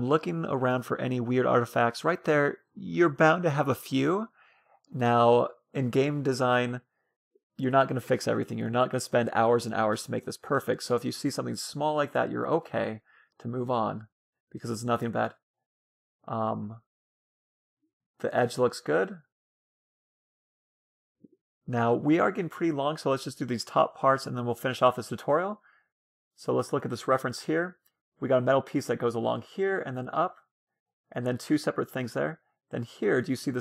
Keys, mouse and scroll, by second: 2.5 Tab, 2.8-3.8 scroll up 1, 3.8-5.8 middle drag, 8.0 Tab, 8.2-9.3 scroll up 1, 9.3-13.3 middle drag, 14.1-17.7 middle drag, 17.7 scroll up 1, 17.9-18.6 scroll down 1, 18.6-21.4 scroll down 1, 23.4-24.3 scroll down 1, 24.3-25.0 scroll down 1, 25.0 middle click, 25.7-27.9 middle drag.